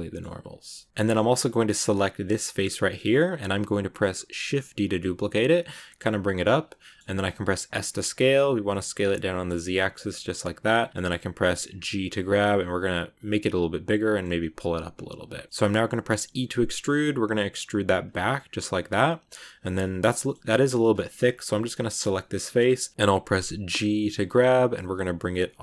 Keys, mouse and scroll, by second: 0.3 a, 0.7-4.3 shift+middle drag, 4.3 shift+d, 6.7 middle click, 7.5 s, 9.9-11.8 middle drag, 11.8 g, 13.3 middle click, 14.1 g, 15.5 middle click, 16.1 e, 18.2-20.3 middle drag, 20.3 scroll up 1, 21.7 right click, 22.2 middle click, 23.6 g.